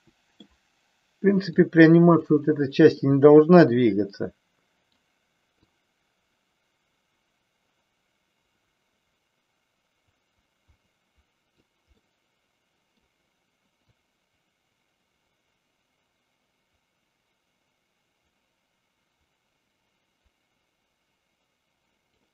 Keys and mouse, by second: 1.5 click, 3.1-5.0 middle drag, 5.7-11.7 drag, 12.1-13.1 middle drag, 14.1-22.2 drag.